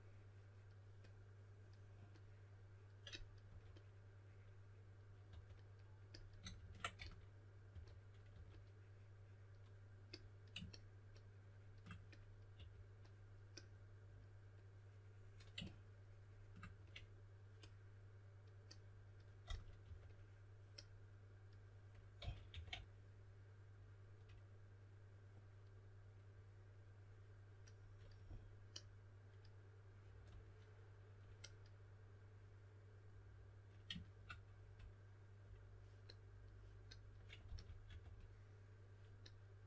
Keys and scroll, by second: 3.4 typing, 5.2 typing, 6.4 super+z, 6.5 super+z, 6.9-8.2 typing, 12.5 4, 16.7 4, 19.2-20.3 typing, 22.1-22.4 typing, 37.2-38.3 typing.